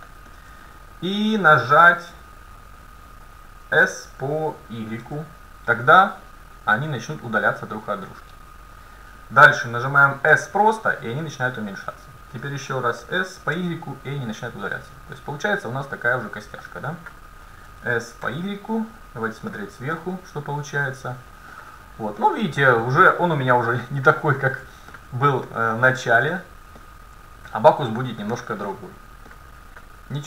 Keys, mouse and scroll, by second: 0.3-0.7 scroll up 1, 0.7 middle click, 3.8 s, 10.3 s, 13.1 s, 17.7 s, 20.0 KP_7, 20.8 middle click, 22.3-23.6 middle drag, 25.6 middle click, 26.3-26.8 scroll down 1, 28.5-30.2 middle drag.